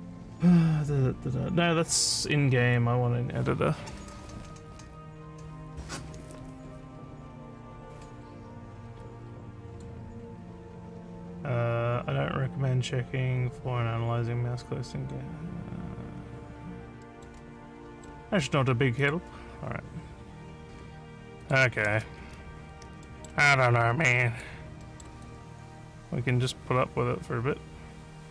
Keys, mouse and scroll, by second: 2.7 scroll down 1, 9.7 click, 10.3 scroll down 2, 11.2 scroll down 1, 17.0 middle click, 17.9 middle click, 19.0 click, 21.4 click, 22.4 alt+scroll up 1, 23.1 alt+middle click, 23.5 alt+click, 24.8 alt+middle click, 25.3-28.3 alt+drag.